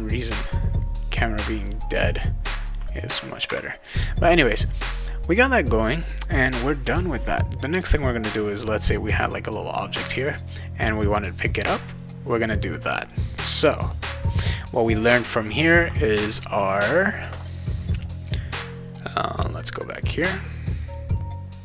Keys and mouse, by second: 0.4 a, 1.4 d, 13.0 click, 17.4 click, 19.8 click, 20.8 click.